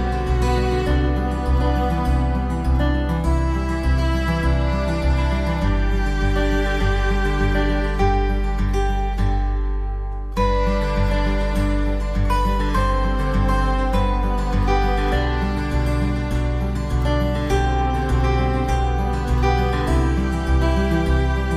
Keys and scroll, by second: 0.3 ctrl+=, 12.9 ctrl+0, 14.3 ctrl+=.